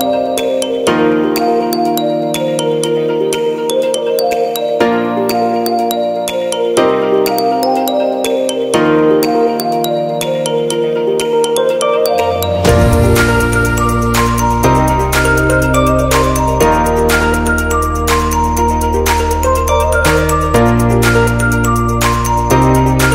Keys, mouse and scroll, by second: 0.4 shift+middle click, 0.9 shift+middle click, 1.4 scroll up 2, 1.6 shift+middle click, 2.1 scroll up 1, 2.1 middle click, 3.0 scroll down 1, 3.4 middle click, 3.8 scroll down 2, 4.9 Tab, 5.5 middle click, 7.6 l, 9.1 click, 12.0 middle click, 13.1 scroll up 2, 13.4 shift+middle click, 15.9 l, 16.3-16.7 scroll down 3, 16.7 middle click, 17.4-17.7 scroll up 1, 17.7 middle click, 19.9 click.